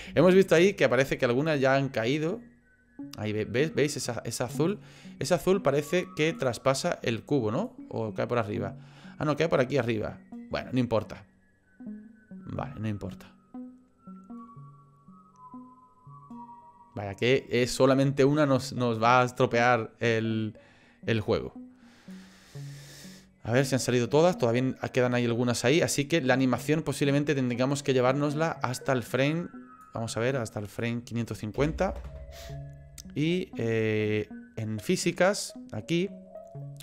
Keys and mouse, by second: 0.6 click, 1.0-4.4 drag, 4.4 middle click, 6.4 middle click, 7.6 middle click, 8.5-22.1 drag, 23.1-26.6 middle drag, 27.0-29.8 drag, 30.8-32.7 drag, 31.7 KP_5.